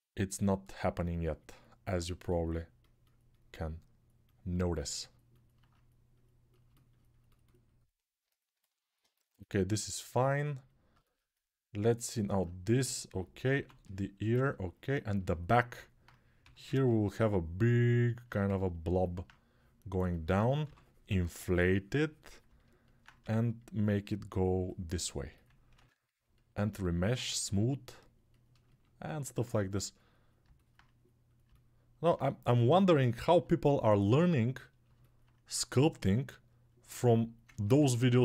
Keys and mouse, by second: 13.3 1, 15.3-18.7 alt+right drag, 16.2 g, 20.4 6, 23.0 g, 25.6 ctrl+r, 25.6-38.2 ctrl+drag.